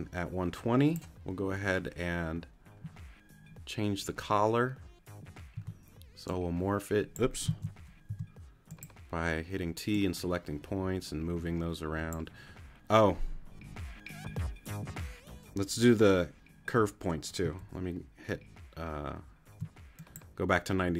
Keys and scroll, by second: 5.5 t, 7.7 super+z, 8.1 super+t, 8.6 t, 17.6 super+z.